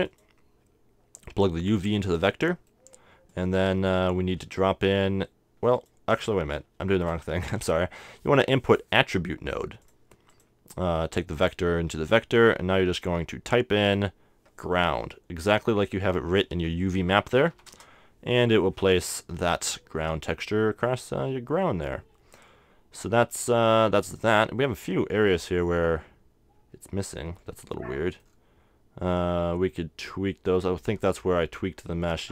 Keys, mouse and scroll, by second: 0.2-2.9 drag, 2.4-3.7 middle drag, 3.3-5.0 drag, 3.7 right click, 5.7-7.3 drag, 6.2 x, 6.9 shift+a, 7.4 click, 10.4-13.0 drag, 13.9-15.6 drag, 24.3-26.3 middle drag, 27.5-31.5 middle drag.